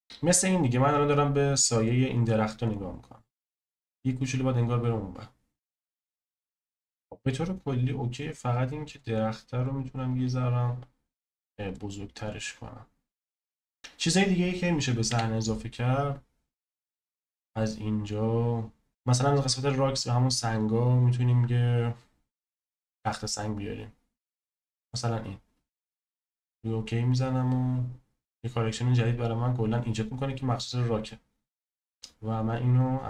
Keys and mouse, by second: 1.8 click, 7.0-9.0 drag, 9.5 click, 10.1 s, 12.2 click, 15.1 n, 16.5-28.8 drag, 32.5 click.